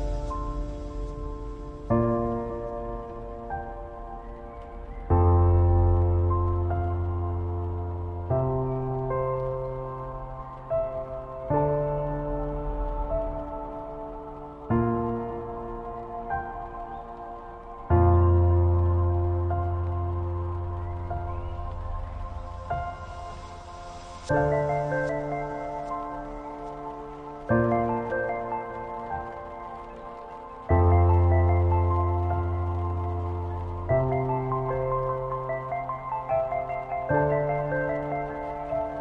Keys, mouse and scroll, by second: 7.8 ctrl+a, 9.2 click, 11.1 scroll up 1, 12.1-12.8 scroll down 1, 12.8-17.2 drag, 14.3 click, 17.2 alt+scroll up 1, 17.8 scroll up 2, 18.3 scroll down 1, 19.1 click, 20.2 Right, 22.0 Up, 22.9 alt+click, 24.2-26.4 alt+drag, 26.5 click, 27.0-31.9 typing, 27.2 click, 32.5 click, 36.4-39.0 typing.